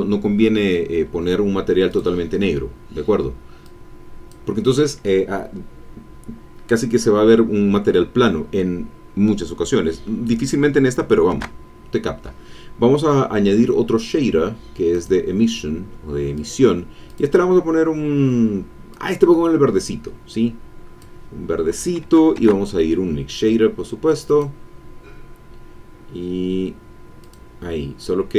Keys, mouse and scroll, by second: 1.9 click, 3.6 click, 11.3 shift+a, 14.9 click, 16.3 click, 17.0 click, 18.9-21.2 drag, 22.3 shift+a, 24.2 click, 27.2 click.